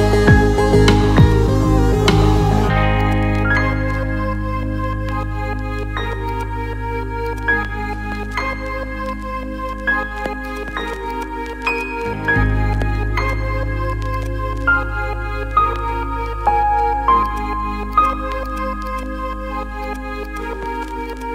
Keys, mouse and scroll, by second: 0.0-1.0 middle drag, 1.5-2.9 middle drag, 3.2-4.4 alt+middle drag, 4.5 KP_0, 5.3 KP_0, 6.4-7.1 ctrl+alt+middle drag, 7.3 alt+shift+middle click, 8.9 z, 10.4 click, 11.0-12.0 drag, 13.1 alt+middle click, 14.1-16.6 drag, 14.9 KP_0, 17.2 click, 17.9 click, 18.4-19.4 shift+middle drag, 19.8-20.1 alt+shift+middle drag, 20.2-20.5 ctrl+alt+middle drag, 21.0-21.3 alt+shift+middle drag.